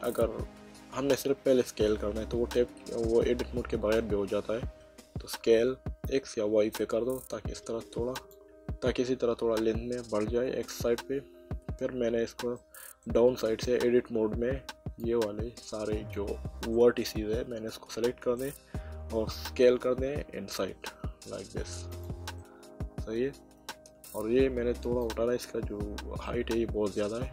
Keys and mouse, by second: 3.9 Tab, 5.3 s, 6.4 x, 8.1 click, 12.5 middle click, 13.8 Tab, 15.0 click, 16.7 middle click, 20.1 s, 21.9 click, 22.4 middle click, 25.0 click, 26.2 middle click.